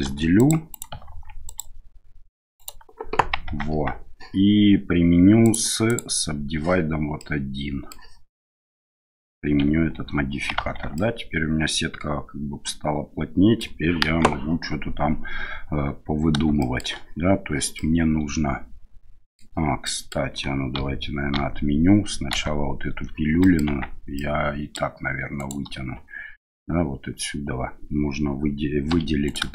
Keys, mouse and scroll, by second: 0.0 ctrl+r, 1.0 ctrl+r, 3.5 Tab, 5.5 click, 5.9 click, 7.2-7.9 middle drag, 9.9 ctrl+a, 10.5 Tab, 10.9-13.6 middle drag, 14.0 KP_1, 16.6 shift+middle click, 17.7-19.4 middle drag, 19.8 middle click, 20.8 ctrl+z, 21.3 ctrl+z, 22.3 ctrl+z, 23.4 middle click, 23.6 Tab, 24.1 middle click, 25.4 right click, 28.9 3, 29.2 right click.